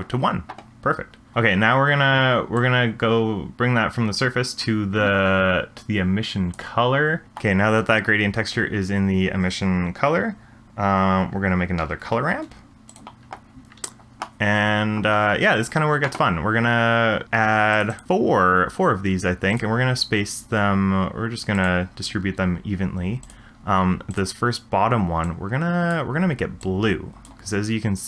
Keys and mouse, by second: 1.3-2.6 middle drag, 2.6 click, 3.0-6.5 drag, 7.2 middle click, 11.8 ctrl+r, 17.7 click, 17.9 click, 19.6-21.7 drag, 23.3 click, 24.1 click.